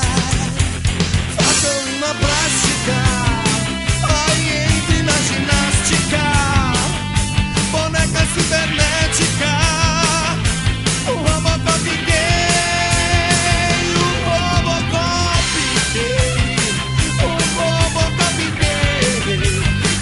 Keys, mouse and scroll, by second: 0.3 click, 2.7 middle click, 5.0 click, 6.4 middle click, 10.4 click, 10.6 click, 11.3 middle click, 12.5 Tab, 13.8 Tab, 14.6 middle click, 16.0 KP_0, 18.5 click, 19.4 click.